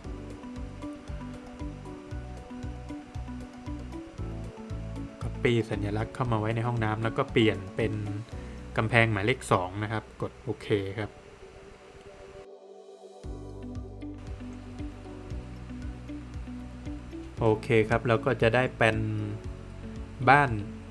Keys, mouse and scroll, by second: 0.2 Escape, 0.5 click, 1.0 double click, 2.4 space, 2.7 click, 5.7 click, 6.0 Escape, 6.8 click, 7.2 double click, 8.7 click, 11.3 middle click, 11.6 Escape, 13.8 middle click, 14.9 scroll down 1, 15.2 middle click, 17.6 scroll down 1, 18.0 middle click, 18.5 scroll down 1, 19.0 middle click.